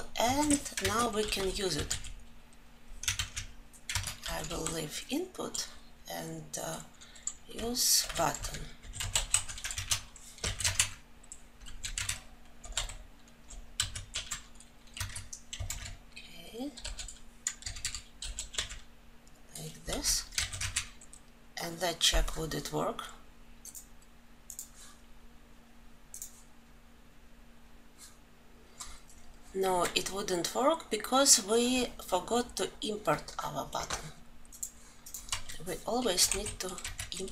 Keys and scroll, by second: 2.8 ctrl+z, 9.4 Tab, 11.3 ctrl+alt+l, 15.4 ctrl+;, 19.5 ctrl+alt+l.